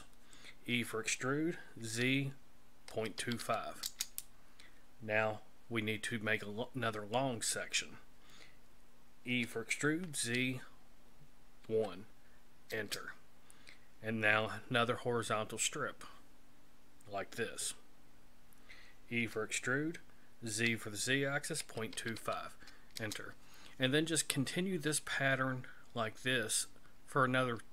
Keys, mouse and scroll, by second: 0.7 e, 9.3 e, 19.2 e.